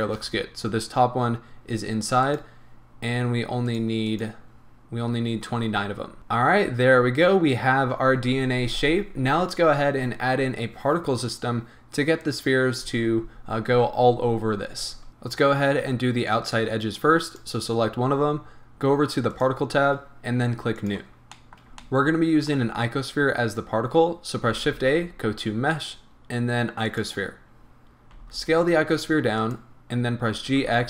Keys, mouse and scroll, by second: 0.0 shift+click, 2.3 click, 3.7 click, 4.0-6.2 drag, 6.2-17.3 middle drag, 14.9 scroll up 2, 17.3 click, 19.3 click, 20.7 click, 21.3-29.5 middle drag, 24.5 shift+a, 28.4 s, 29.5 click, 30.3 g.